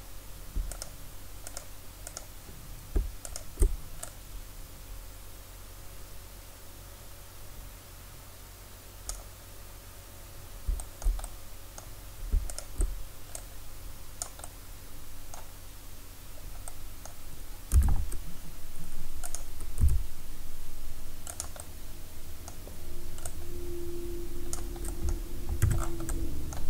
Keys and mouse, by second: 0.8 click, 1.2-9.1 right drag, 11.3 middle click, 11.8-14.5 drag, 13.4-14.7 right drag, 14.7 click, 16.7 middle click, 17.8 e, 19.8 s, 21.6 click, 24.8 click, 25.7 Tab.